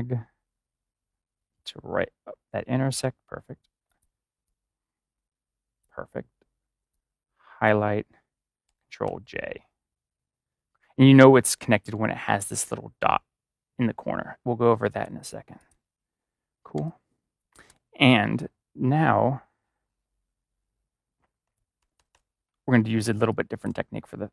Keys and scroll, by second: 9.0 ctrl+j, 16.7-17.4 typing, 21.7 ctrl+-, 23.1 space, 23.6 space.